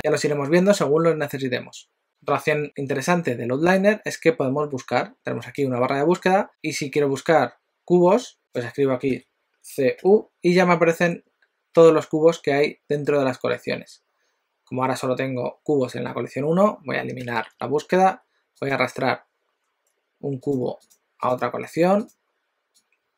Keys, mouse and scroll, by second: 5.5 click, 17.3 BackSpace, 17.6 BackSpace, 20.5 click, 20.8 click, 22.0 click, 22.8 click.